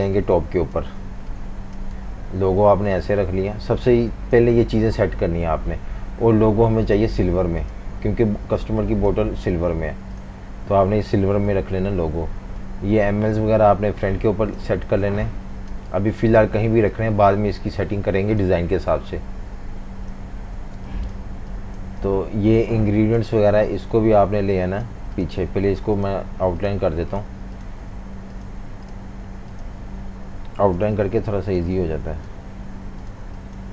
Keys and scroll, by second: 1.0-2.6 typing, 11.2 super+-, 11.5 super+-, 14.9-16.5 typing, 18.9 super+-, 19.1 super+-, 20.1 F19, 20.6-21.8 typing, 30.8 super+g.